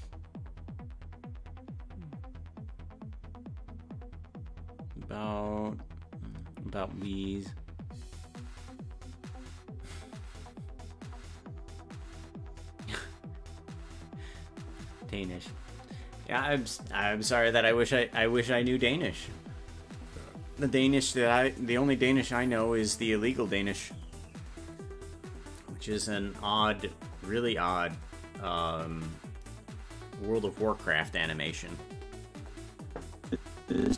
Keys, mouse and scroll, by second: 33.3-33.9 drag.